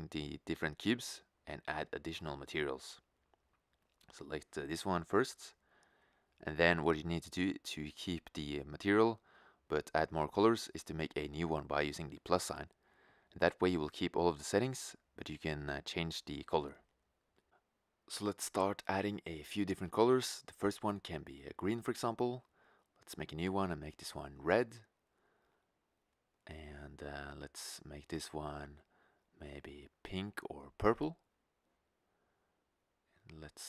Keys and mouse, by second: 2.3-4.0 right drag, 4.0-5.8 drag, 5.8 middle click, 6.6 shift+z, 13.4-16.7 drag, 21.5 right click, 22.2 drag, 26.1 right click, 27.1-28.8 drag, 33.3 right click.